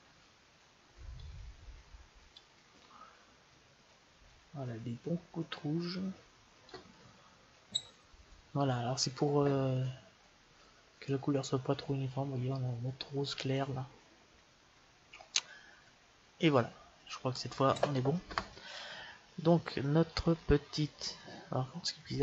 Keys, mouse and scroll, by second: 1.1-2.5 drag, 19.8 click, 20.8 click, 21.7 click.